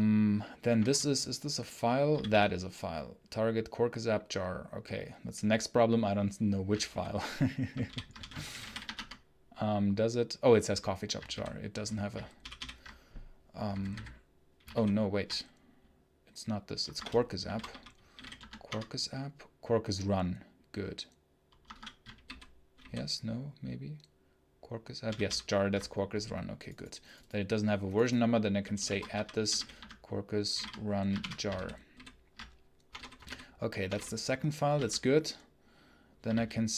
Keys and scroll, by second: 0.6 space, 0.8 h, 2.0 k, 12.4 ctrl+super+l, 13.6 b, 13.8 b, 22.6 ctrl+super+h, 31.8 ctrl+super+h, 32.7-34.6 typing, 36.2 ctrl+v.